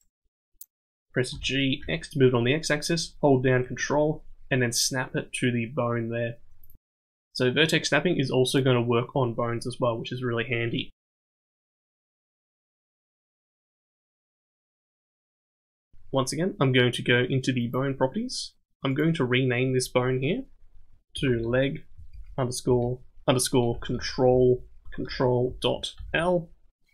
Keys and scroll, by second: 1.3 g.